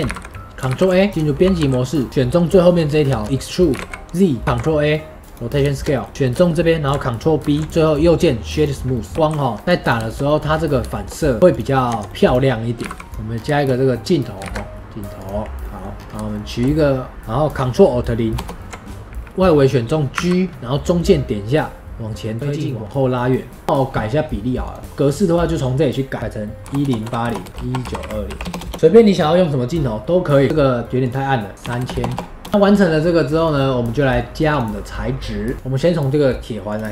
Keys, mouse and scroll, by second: 0.5 middle click, 0.6 ctrl+a, 1.1 Tab, 1.5 2, 1.9 click, 2.8 scroll down 2, 3.1 shift+middle click, 3.6 e, 4.4 ctrl+a, 5.4 scroll down 2, 5.7-6.1 shift+middle drag, 6.1 Tab, 6.1-7.3 shift+middle drag, 7.3 ctrl+b, 7.7 middle click, 7.7-8.8 right drag, 8.8 middle drag, 9.1 s, 9.7 click, 10.0-10.4 shift+middle drag, 10.4 scroll up 3, 10.8-11.4 shift+middle drag, 11.4-11.8 drag, 11.8 Tab, 12.0 middle click, 12.1 2, 12.1 click, 12.7 g, 13.1 ctrl+s, 13.2 scroll down 3, 13.5-14.3 shift+middle drag, 14.3 shift+a, 15.5-15.9 middle drag, 15.9-16.2 scroll up 3, 16.2-18.3 shift+middle drag, 18.3 ctrl+alt+KP_0, 20.0 g, 22.1 right click, 23.6 space, 24.6 click, 26.2-28.7 drag, 28.7-30.0 shift+middle drag, 30.4 click, 31.0 click, 31.9 KP_0, 32.1 KP_0, 32.5 shift+middle click, 33.3-35.5 drag, 36.6-36.9 drag.